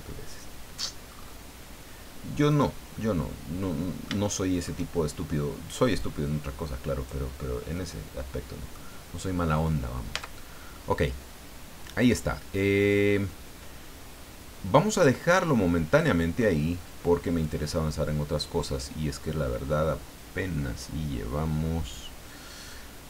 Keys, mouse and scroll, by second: 1.1-1.5 scroll up 1, 2.5 right click, 2.8-4.8 middle drag, 6.0-7.2 drag, 7.3 scroll down 2, 7.8-8.9 middle drag, 9.0 scroll down 2, 9.4-9.7 scroll up 2, 10.1 Tab, 10.5 scroll down 2, 10.8-16.5 middle drag, 17.4 click.